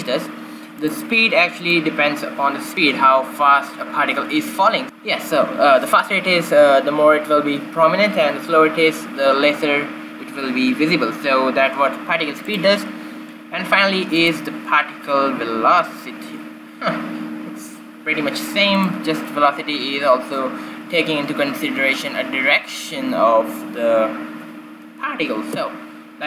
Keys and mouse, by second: 0.9-3.7 drag, 13.6-17.3 drag.